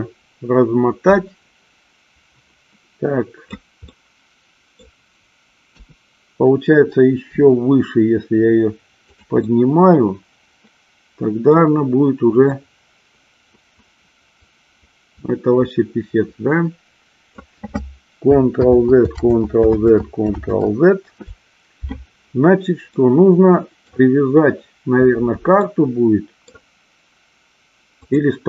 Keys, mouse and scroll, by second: 4.0-5.0 middle drag, 5.8 KP_1, 7.5 r, 9.2 click, 9.6-11.5 middle drag, 12.5-17.5 drag, 18.8 ctrl+z, 19.3 ctrl+z, 19.9 ctrl+z, 20.4 ctrl+z, 23.0-24.0 middle drag, 25.6 middle click, 28.3 click.